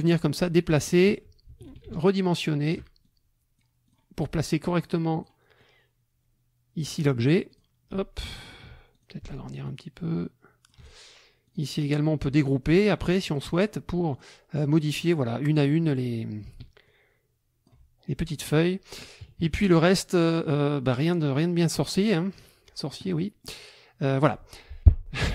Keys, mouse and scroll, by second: 0.7 click, 2.0 ctrl+shift+click, 3.0 ctrl+shift+click, 3.9 click, 4.8 click, 5.6-7.0 drag, 7.5 click, 8.9 ctrl+shift+click, 9.7-11.1 ctrl+shift+drag, 11.5 click, 13.2 click, 14.1 click, 16.8-17.8 ctrl+drag, 18.3 ctrl+click, 18.7 middle click, 18.7-19.2 scroll up 1, 19.2 KP_Subtract, 20.2 click, 21.0 click, 21.3 click, 23.1 click.